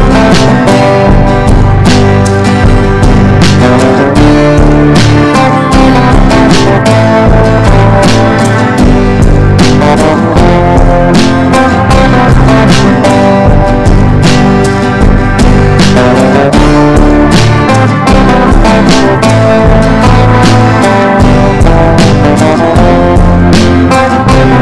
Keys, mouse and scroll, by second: 7.2 Up, 7.4 typing, 8.7-18.4 drag, 19.2 ctrl+g, 21.0 click, 23.8 Down, 24.3 typing.